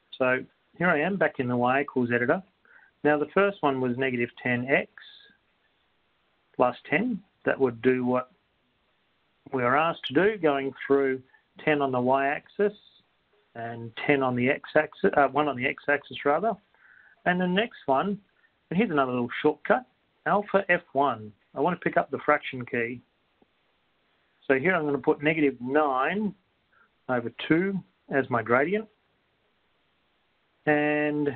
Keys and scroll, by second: 4.4 1, 5.4 0, 6.0 x, 7.4 1, 8.0 0, 9.0 Return, 23.6 Return, 27.0 9, 27.4 Down, 28.4 2, 30.0 Right.